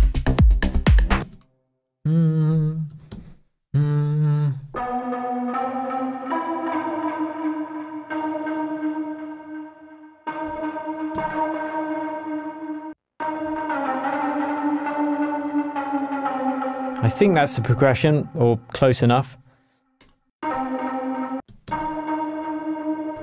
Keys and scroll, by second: 1.2 space, 3.1 shift+super+m, 11.1 alt+space, 11.5 BackSpace, 12.9 space, 13.4 alt+space, 17.7 alt+super+a, 20.3 space.